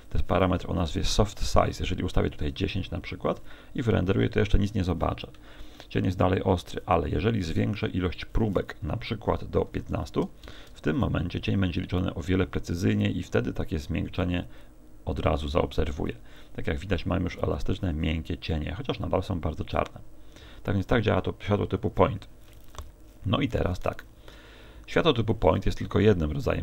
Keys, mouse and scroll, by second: 25.5 Escape.